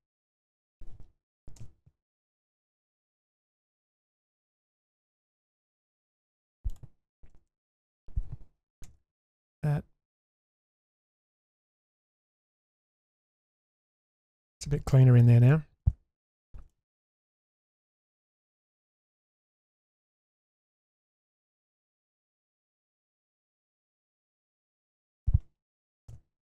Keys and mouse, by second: 1.6 k, 7.3 2, 7.9 click, 8.8 ctrl+x, 9.2-10.4 middle drag, 10.7-13.2 middle drag, 13.4 Tab, 14.0 Tab, 14.9 middle click, 15.5-15.8 shift+middle drag, 16.2 middle click, 16.7 shift+middle drag, 17.0 shift+middle drag, 17.4 shift+middle drag, 17.7-18.7 middle drag, 20.6-21.3 shift+middle drag, 26.1 k.